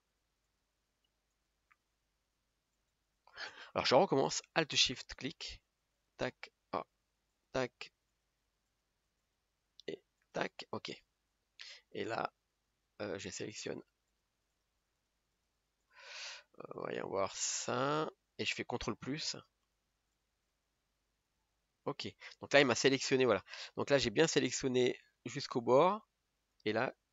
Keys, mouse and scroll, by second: 0.0 alt+shift+click, 0.6 alt+shift+click, 4.7 click, 6.1 alt+shift+click, 6.9 click, 8.3 alt+shift+click, 10.4 alt+shift+click, 10.9 scroll down 1, 11.2-13.8 middle drag, 13.8 shift+click, 14.2-16.3 shift+click, 18.1 shift+click, 19.3 ctrl+KP_Add, 19.8 ctrl+KP_Add, 22.7 scroll down 2, 23.2 middle click, 23.6 scroll up 2, 24.0-27.0 middle drag, 27.0 scroll up 1.